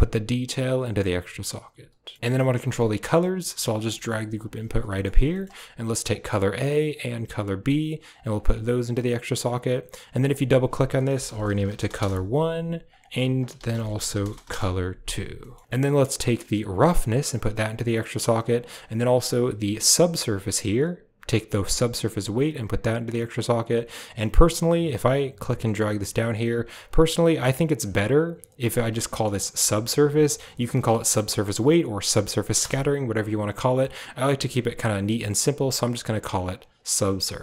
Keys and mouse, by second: 0.7 click, 2.6 middle click, 3.4 g, 3.8-4.2 middle drag, 4.3 g, 4.8 middle click, 5.2 middle click, 6.0-6.6 drag, 7.3-8.0 drag, 8.2 click, 10.0-11.9 drag, 12.9-14.5 drag, 15.2 middle click, 15.8 middle click, 16.1 middle click, 17.2-18.1 drag, 18.4 click, 21.9-23.2 drag, 24.9-26.5 drag, 27.5 click, 28.4-32.5 drag, 29.5 BackSpace, 29.6 BackSpace, 29.9 BackSpace, 30.6 BackSpace, 35.7 Tab, 37.0 Tab.